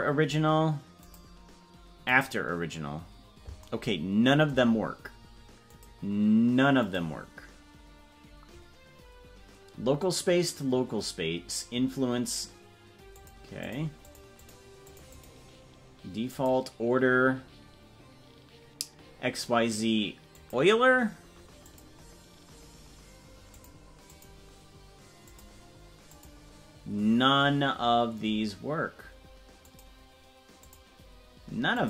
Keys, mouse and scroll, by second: 1.0-2.2 drag, 5.6-7.0 drag, 13.2 click, 13.7 click, 14.1 click, 14.4 click, 15.0 click, 16.3-20.5 drag, 21.6-23.7 drag, 24.1-25.5 drag, 26.1-30.0 drag, 30.6-31.8 drag.